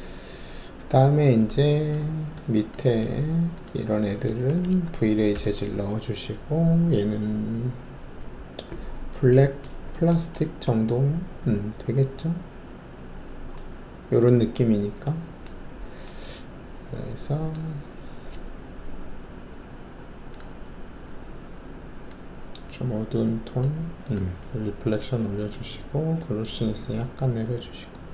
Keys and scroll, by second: 5.3 alt+shift+v.